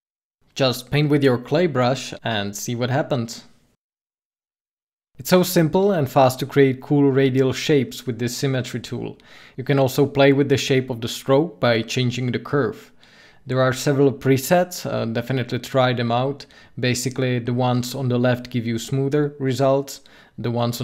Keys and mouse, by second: 2.0 KP_5, 2.8 KP_5, 4.2-5.4 drag, 5.9 ctrl+z, 8.7 ctrl+z, 15.6-17.0 drag, 17.8 ctrl+z.